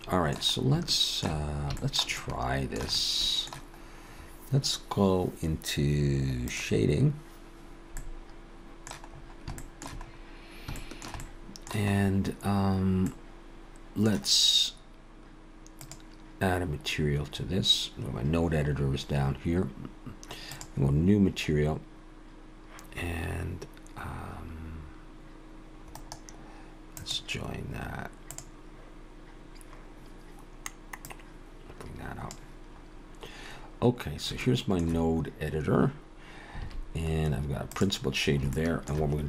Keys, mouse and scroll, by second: 0.9 shift+middle click, 1.5 scroll up 1, 1.8 shift+middle click, 2.2 shift+middle click, 3.0 middle click, 3.8-4.5 scroll up 1.